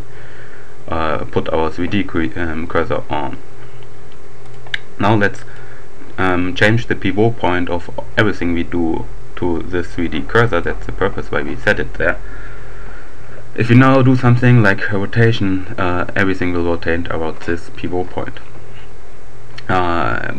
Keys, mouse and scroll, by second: 4.5 click, 5.3 click, 9.9-11.2 drag, 14.3 r, 17.7 Escape.